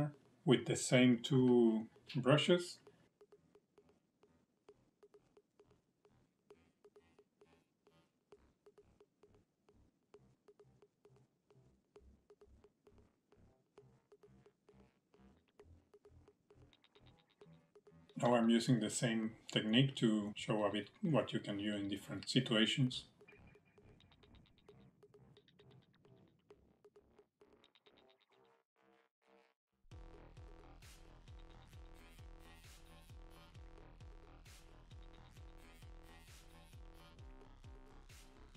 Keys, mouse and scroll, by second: 0.5 middle click, 3.5 click, 5.6 click, 7.2 middle click, 7.7 click, 8.9 middle click, 9.2 click, 10.4 middle click, 10.6 middle click, 11.1 click, 11.8 middle click, 12.1 click, 13.1 middle click, 13.7 scroll down 1, 13.8 middle click, 14.1 shift+middle click, 14.3 middle click, 14.9-15.3 scroll down 3, 15.0 middle click, 15.6 middle click, 16.9 scroll up 3, 17.2 shift+middle click, 17.4 middle click, 18.1 middle click, 18.3 click, 18.5 click, 18.6 click, 18.7 click, 19.7 click, 22.2 middle click, 22.9 click, 25.4 scroll up 1, 25.5 shift+middle click, 25.9 click, 28.5 middle click, 28.9 shift+middle click, 29.1 middle click, 29.7 click, 30.9 middle click, 30.9 scroll up 1, 31.2 scroll down 3, 31.3 shift+middle click, 31.6-32.2 scroll up 1, 32.2 click, 34.0 middle click, 34.6 click, 35.6 middle click, 36.0 scroll up 3, 36.1 shift+middle click, 36.5 click, 37.6 middle click, 38.3 shift+middle click.